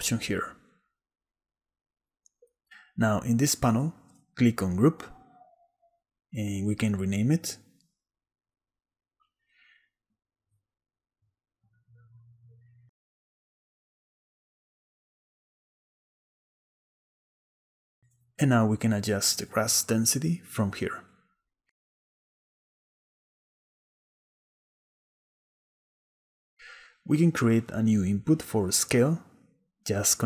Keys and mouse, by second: 4.7 click, 7.7-9.8 drag, 9.8 middle click, 10.1 BackSpace, 10.2 BackSpace, 10.4-15.6 drag, 13.9 s, 18.1-19.8 shift+drag, 19.8-24.1 shift+middle drag, 26.3 middle click, 27.1 click, 27.9 middle click, 28.4 middle click.